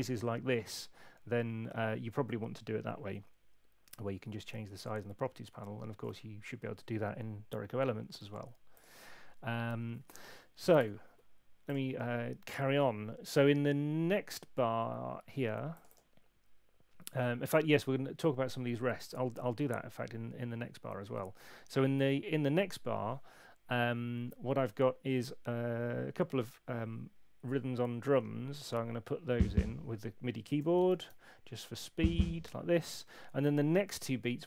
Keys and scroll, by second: 10.7 BackSpace, 28.1 4, 30.6 5, 30.8 space, 31.7 4, 33.8 Escape.